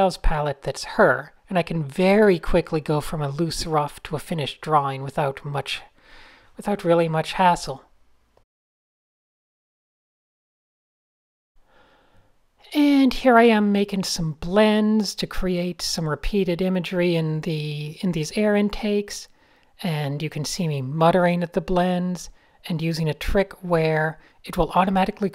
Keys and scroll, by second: 0.0 shift+super+a, 0.3-1.2 typing, 2.6 shift+v, 5.4 a, 6.2 alt+shift+super+b, 7.2 Up, 7.3-7.6 typing, 7.7 Up, 7.8 Up, 9.0 a, 10.6 shift+super+a, 10.7 p, 11.0 super+y, 11.3 super+y, 12.4 a, 13.4 shift+super+b, 14.5 typing, 17.3 v, 18.3 super+z, 18.4 super+z, 18.5 super+z, 18.5 super+z, 18.6 super+z, 18.8 super+z, 19.0 super+z, 19.3 super+z, 19.6-20.0 typing, 21.5 alt+shift+super+b, 22.9 a, 24.1 shift+super+b, 25.1 alt+super+b.